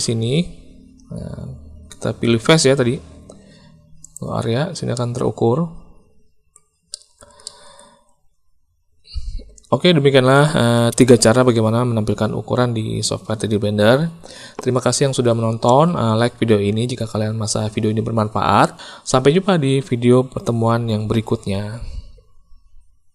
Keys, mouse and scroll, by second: 4.0 click, 4.9-6.5 middle drag, 6.9 shift+click, 7.4 middle click.